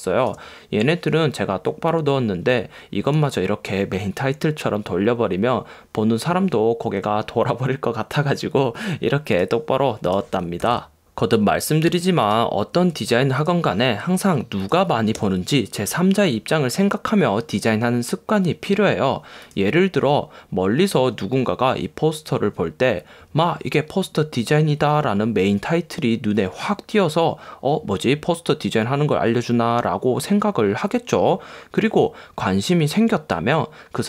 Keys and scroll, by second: 12.9 BackSpace, 14.0 BackSpace.